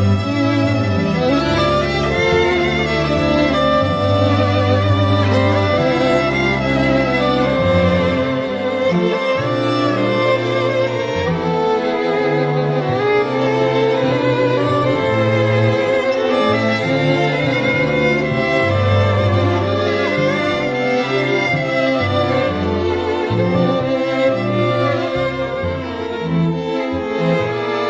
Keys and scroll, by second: 8.9 ].